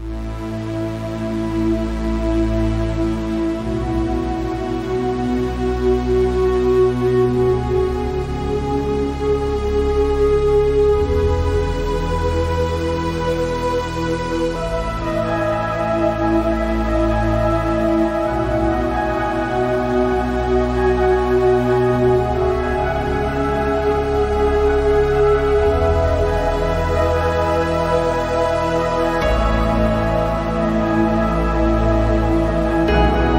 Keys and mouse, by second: 0.8 click, 2.3 click, 12.7 s, 21.0 click, 24.3 middle click, 25.1 middle click, 27.8 middle click.